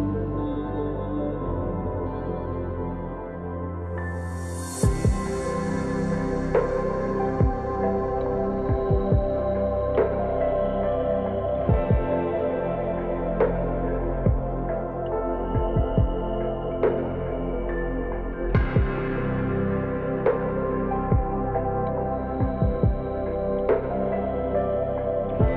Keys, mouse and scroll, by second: 1.1 alt+shift+click, 2.4-4.0 middle drag, 4.0 shift+click, 4.7-5.2 scroll down 2, 5.3-7.7 middle drag, 7.7 scroll up 2, 8.2-9.8 middle drag, 9.8 shift+click, 10.4-13.5 middle drag, 14.3-16.7 middle drag, 16.7 alt+shift+click, 17.8-20.5 middle drag, 20.5 alt+shift+click, 21.1-24.2 middle drag, 24.8-25.2 scroll up 1, 25.2-25.5 middle drag.